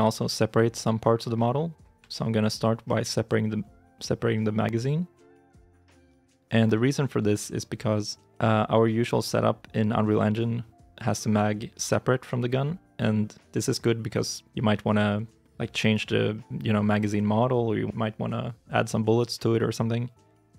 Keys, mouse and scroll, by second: 2.0 shift+middle click, 3.4 scroll up 1, 4.0-5.1 scroll down 1, 5.2 shift+middle click, 5.8 scroll up 1, 6.3 scroll down 1, 6.6 shift+middle click.